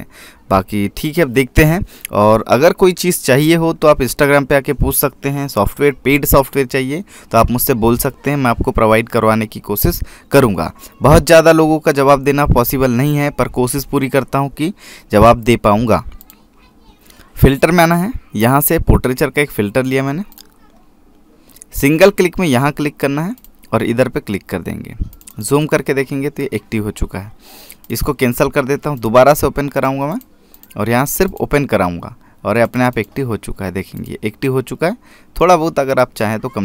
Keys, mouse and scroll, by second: 17.0 click, 21.2 click, 23.3 click, 29.6 click.